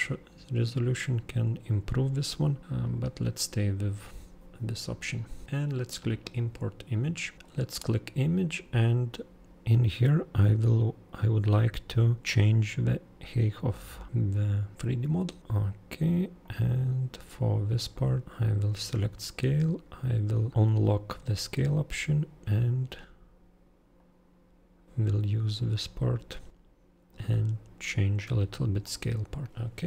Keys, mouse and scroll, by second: 6.2 super+click, 7.3 super+click, 15.4 super+click, 16.4 super+click, 17.9 super+click, 18.4 super+click, 24.0 super+click, 28.8 super+click, 29.3 super+click, 29.5 super+click.